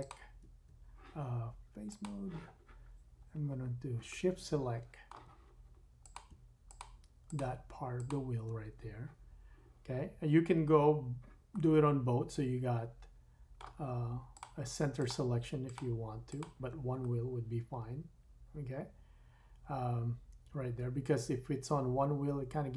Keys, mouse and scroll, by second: 0.1-1.8 middle drag, 1.8-3.6 drag, 3.4-4.0 scroll up 4, 4.1 shift+middle click, 4.2 shift+click, 4.3 shift+middle click, 4.5 shift+click, 4.6 shift+middle click, 4.6 shift+click, 4.8 shift+middle click, 6.0 click, 6.1 middle click, 6.7 shift+click, 7.3 shift+click, 7.9 shift+click, 9.0-14.3 middle drag, 10.9-11.5 scroll down 3, 14.3 shift+click, 14.4 shift+middle click, 14.9 shift+click, 15.1 shift+middle click, 15.6 shift+click, 15.7 shift+middle click, 16.3 shift+click, 16.4-22.7 shift+middle drag.